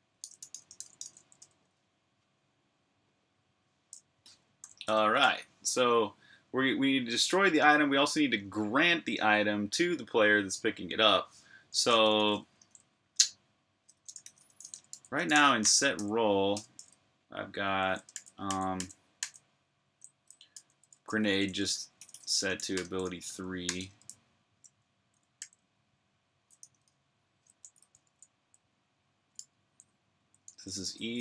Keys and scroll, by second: 0.0-1.5 typing, 4.4 typing, 12.4 typing, 13.8-19.0 typing, 20.1-23.6 typing, 25.2 super+j, 26.4 typing, 28.0-31.2 typing.